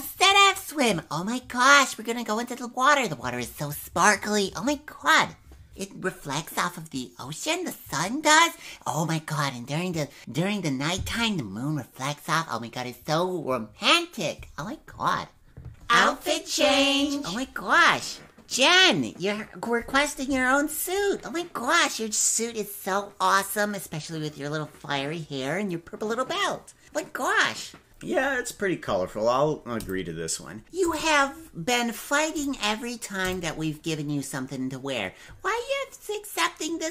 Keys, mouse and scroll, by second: 15.7 click, 31.1-31.9 typing.